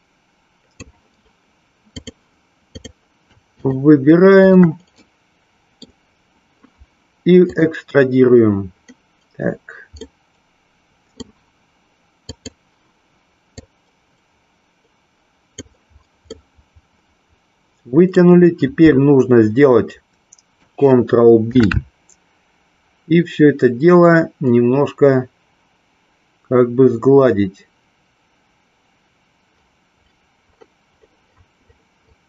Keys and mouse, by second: 1.9 click, 3.4 shift+click, 5.1 middle click, 7.6 click, 9.9-11.3 middle drag, 12.4 click, 13.6-15.6 drag, 16.3-18.3 middle drag, 21.4 ctrl+b.